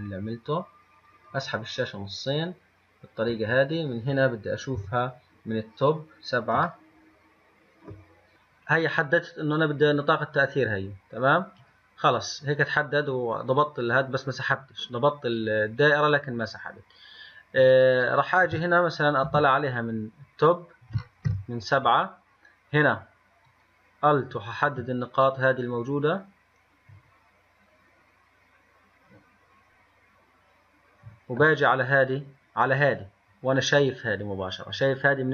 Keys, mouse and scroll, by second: 1.2-4.1 drag, 5.0 KP_7, 5.8-6.1 scroll up 2, 7.0-8.3 shift+middle drag, 8.3 g, 18.4 click, 19.5 KP_1, 19.6 KP_1, 21.5 KP_7, 21.7 KP_7, 23.7 click, 24.8 alt+click.